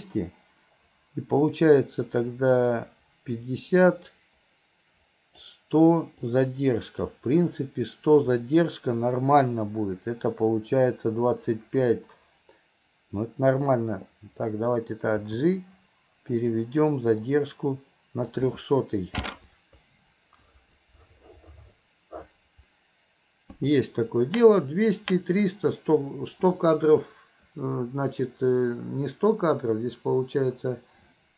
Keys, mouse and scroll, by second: 1.8-5.6 drag, 6.3-7.1 drag, 17.3-18.4 drag.